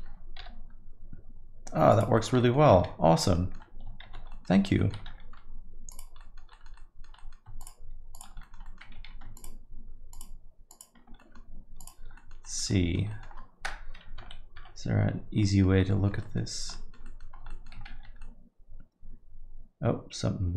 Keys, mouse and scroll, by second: 0.4 g, 2.1 alt+middle click, 2.4 middle click, 2.8 shift+z, 3.3 alt+middle click, 4.0 shift+z, 4.3 alt+middle click, 4.5 middle click, 4.7 alt+middle click, 5.0 shift+z, 5.9 click, 6.2 alt+middle click, 6.5 middle click, 6.7 alt+middle click, 7.1 middle click, 7.6 shift+click, 8.1 click, 8.4 alt+middle click, 8.6 middle click, 9.0 ctrl+z, 9.3 shift+click, 10.1 shift+click, 11.1 alt+middle click, 11.8 alt+click, 12.1 alt+middle click, 12.4 middle click, 12.7 alt+middle click, 13.1 alt+middle click, 14.2 KP_1, 14.5 KP_3, 15.4 middle click, 15.9 alt+middle click, 16.2 middle click, 16.5 scroll down 2, 16.7 alt+middle click, 17.0 middle click, 17.3 scroll down 1, 17.5 alt+middle click, 17.9 shift+z, 18.2 alt+middle click.